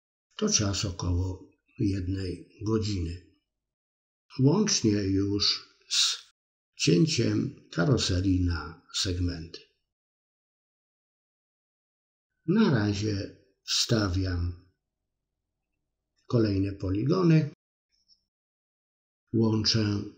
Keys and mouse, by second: 0.5 middle click, 1.1 f, 1.3 middle click, 1.8 middle click, 2.3-3.5 middle drag, 4.6 shift+click, 5.3 f, 5.4 middle click, 6.4 middle click, 8.1-9.2 ctrl+drag, 9.4 middle click, 9.8 middle click, 11.6 click, 12.4 middle click, 13.1 click, 13.7 click, 14.1-15.6 middle drag, 16.0-17.6 drag, 17.6 f, 17.7 middle click, 18.5 shift+middle click, 19.1 click, 20.0 f.